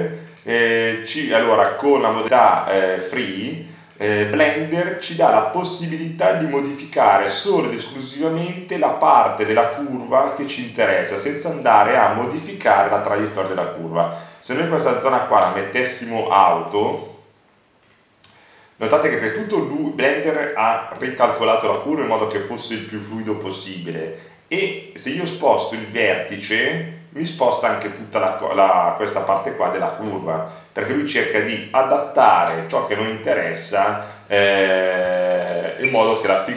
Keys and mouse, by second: 3.7 click, 6.2 middle click, 9.1 middle click, 9.7-11.2 right drag, 12.3-17.7 drag, 19.1 click, 25.5-30.3 right drag.